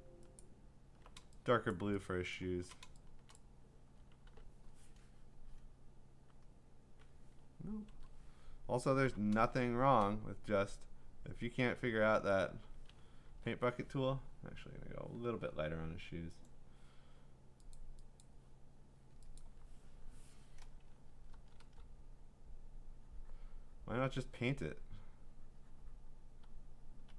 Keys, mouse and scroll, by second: 0.4 alt+click, 1.7 click, 1.9-2.3 click, 2.5 click, 2.7 click, 2.9 click, 3.4 click, 4.3 g, 6.4 click, 7.9 ctrl+z, 9.1 b, 10.1 b, 12.4 click, 13.0 click, 13.3 ctrl+z, 16.5 click, 17.7 click, 18.2 click, 19.4 click, 20.9 click, 21.1 [, 21.3 [, 21.6 [, 26.4 click, 26.4-27.1 ].